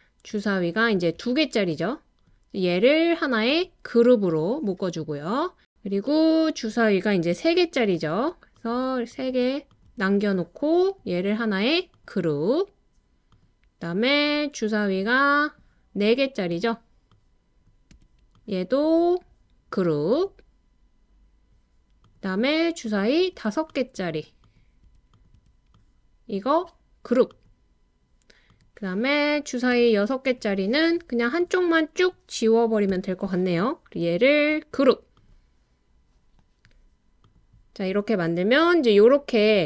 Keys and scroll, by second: 1.2 BackSpace, 7.3-9.8 typing, 16.5 typing, 32.9 BackSpace.